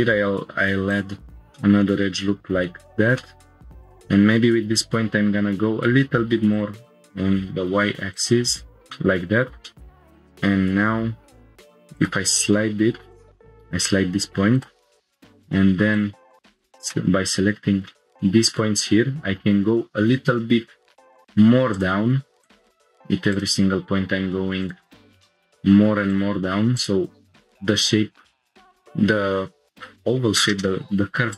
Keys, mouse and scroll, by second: 0.9 right click, 1.5 shift+middle click, 1.8-2.2 middle drag, 2.3 scroll up 1, 2.6 shift+middle click, 3.2 middle click, 3.5 scroll up 1, 3.6 scroll down 1, 3.8 click, 4.7 g, 5.3 y, 6.5-8.1 drag, 8.9 middle click, 8.9 click, 9.6 shift+middle click, 9.9 click, 10.1 shift+click, 10.2 shift+click, 10.9 g, 11.1 g, 12.0 click, 12.2 scroll down 2, 12.5-13.0 shift+middle drag, 13.2 scroll down 1, 13.4 shift+middle click, 13.7 scroll up 2, 14.6-15.1 drag, 15.9 ctrl+click, 16.6 shift+middle click, 16.9-17.4 middle drag, 17.5 scroll up 1, 17.9 shift+middle click, 18.2 middle click, 19.1 g, 19.3 z, 21.7-22.2 drag, 22.6 g, 22.6 z, 23.3 shift+click, 24.8 shift+click, 25.1 g, 25.1 z, 26.1 shift+click, 27.6 g, 27.7 z, 28.5 shift+click.